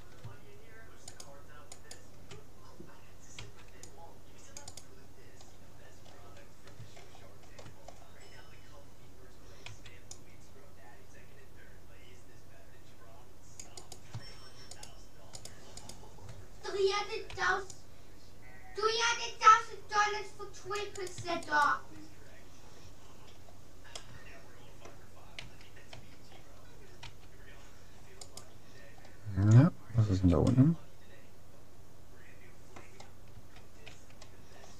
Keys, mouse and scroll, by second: 1.2-3.4 right drag, 3.4 c, 4.8-6.6 right drag, 7.0-10.2 middle drag, 9.7 c, 14.8-17.4 right drag, 17.4 c, 21.2-23.0 right drag, 22.3-23.6 middle drag, 24.0-25.6 middle drag, 25.4 a, 26.0 a, 27.0 s, 28.8-29.8 scroll up 1, 29.8-32.2 middle drag, 33.4 a, 34.0 a, 34.6-34.7 middle drag.